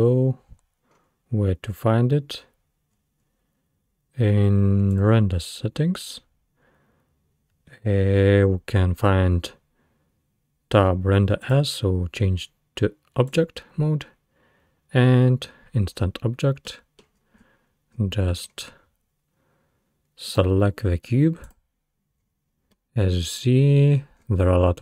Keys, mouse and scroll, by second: 0.9-1.7 scroll up 2, 1.7-3.0 scroll up 1, 3.0-4.3 scroll down 5, 4.3-4.9 scroll down 1, 4.9-5.8 drag, 5.8-7.2 scroll down 3, 11.4-14.4 drag, 16.4 scroll down 2, 16.7-17.2 middle drag, 17.2-18.4 scroll down 15, 18.4-18.9 scroll up 6, 19.7-20.3 scroll up 1, 20.3 click, 22.2-22.8 scroll up 4, 22.8-23.2 middle drag, 23.2-23.7 scroll down 6, 23.7-24.8 scroll up 10.